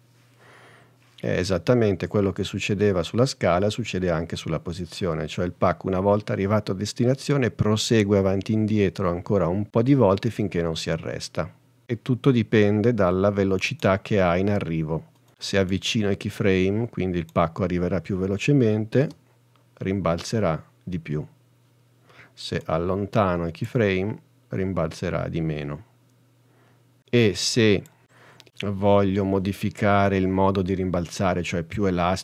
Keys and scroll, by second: 19.3 space.